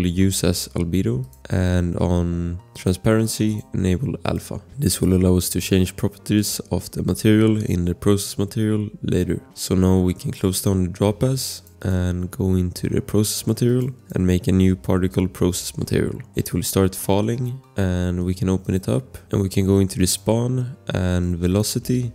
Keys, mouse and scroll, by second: 1.4 scroll, 2.7 click, 4.7 scroll, 11.6 click, 16.4 scroll, 17.2 click, 18.6 click, 19.1 click, 20.0 click.